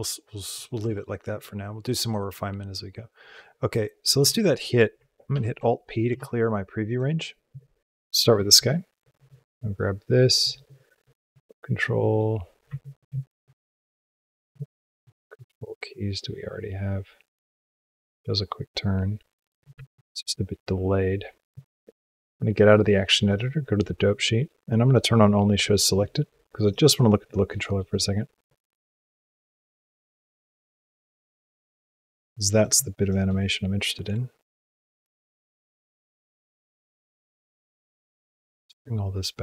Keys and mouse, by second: 0.7 space, 3.4 middle click, 4.1 space, 5.2 alt+p, 6.0 space, 6.8 click, 7.8 Tab, 8.9 click, 11.1 click, 11.9 click, 12.5 a, 14.9-19.5 drag, 19.8 ctrl+Tab, 22.7 click, 24.6 click, 27.4 middle click, 27.7 click, 28.4-31.8 drag, 32.3 click, 32.8 shift+click, 33.5 click, 35.1 click, 35.8 click, 37.6-38.4 drag, 38.6 g.